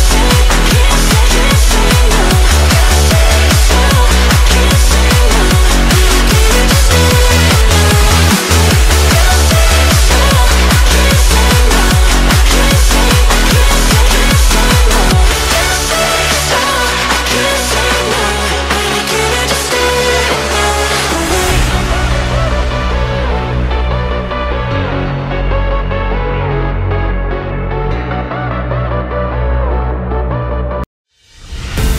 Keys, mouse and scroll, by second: 1.9 m, 2.6 click, 3.1 m, 4.7 alt+z, 4.9 click, 5.3 alt+z, 6.1 m, 6.7 click, 7.8 g, 10.4 Tab, 10.7 scroll down 1, 10.8-11.5 middle drag, 11.5-11.8 scroll down 1, 11.8-13.5 shift+middle drag, 13.5 scroll up 1, 13.8 Tab, 15.5 middle click, 16.1 alt+z, 16.5-18.3 middle drag, 18.3 click, 20.5 Tab, 21.1 alt+z, 21.4-22.4 middle drag, 22.4 Tab, 22.9 click, 23.8 g, 24.8 g, 26.3 middle click, 26.7 Tab, 27.1-27.9 middle drag, 27.9 scroll down 1, 28.1-28.6 middle drag, 28.6 scroll up 1, 28.8 scroll down 1, 28.8-29.6 middle drag, 29.6 Tab, 30.2-31.2 shift+middle drag, 31.2 click.